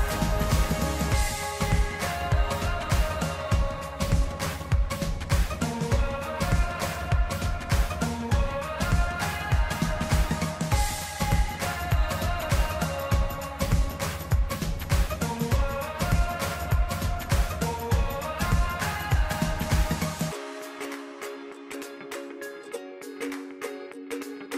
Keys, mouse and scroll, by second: 3.7-14.4 drag, 18.3 click, 20.7 click, 22.9 click.